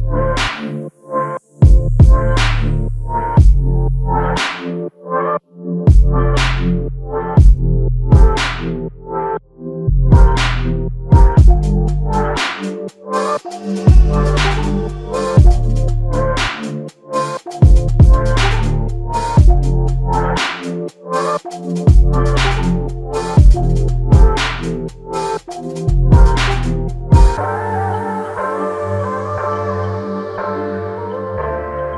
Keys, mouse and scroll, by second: 4.6 ctrl+click, 8.3 alt+click, 11.1 double click, 12.2 alt+click, 16.7 double click, 19.3 alt+click, 20.6 f, 21.3 double click, 24.7 alt+click, 29.0 alt+click.